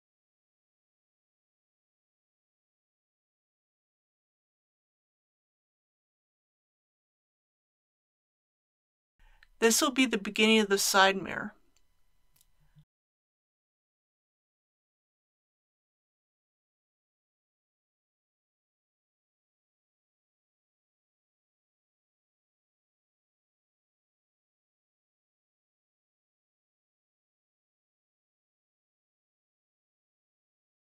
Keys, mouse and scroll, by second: 0.5 click, 0.8 typing, 5.2 click, 5.9-6.3 typing, 7.4 click, 7.9-8.6 typing, 10.6 click, 14.7 click, 15.3 scroll up 1, 17.7 g, 18.0 y, 20.0 click, 20.6 s.